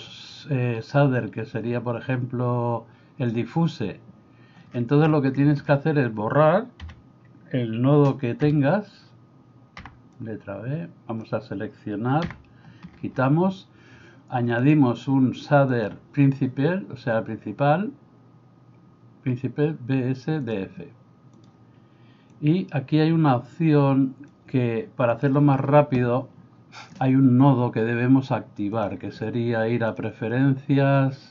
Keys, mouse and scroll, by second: 5.6 middle click, 6.9 a, 8.4 v, 9.8 b, 12.3 Delete, 14.7-21.5 drag, 22.4-24.4 drag, 28.8-31.3 drag.